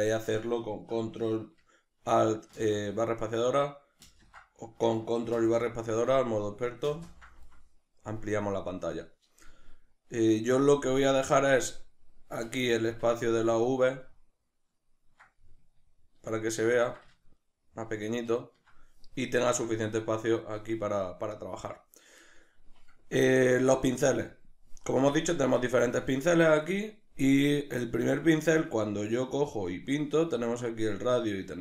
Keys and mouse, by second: 2.6 ctrl+alt+space, 5.4 ctrl+space, 12.5 click, 13.1-31.6 ctrl+middle drag.